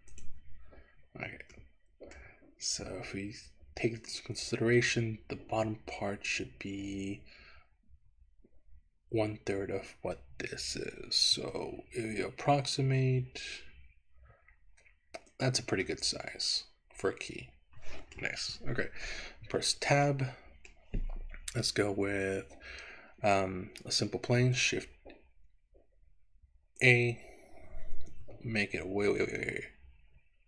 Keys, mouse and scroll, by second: 0.2 click, 0.6-1.4 scroll down 2, 1.6 shift+middle click, 11.4 z, 15.4 click, 15.9-18.3 middle drag, 19.6 Tab, 20.2 middle click, 24.3 shift+a, 27.6-28.4 scroll down 1, 28.4-30.4 scroll down 1, 28.4 s.